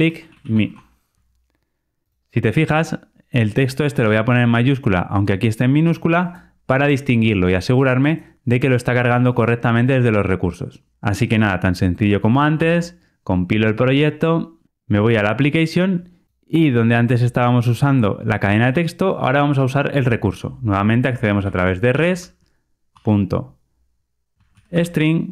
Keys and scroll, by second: 12.5 super+F9.